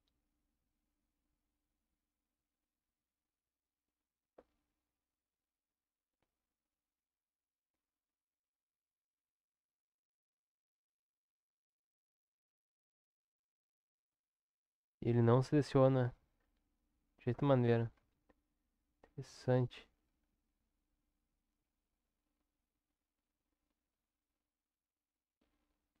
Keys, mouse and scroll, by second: 0.1 Tab, 4.4 click, 6.4 click, 7.4-14.0 drag, 14.0 Tab, 17.9 a, 18.7 a, 19.3 Tab, 20.0 a, 24.5 click.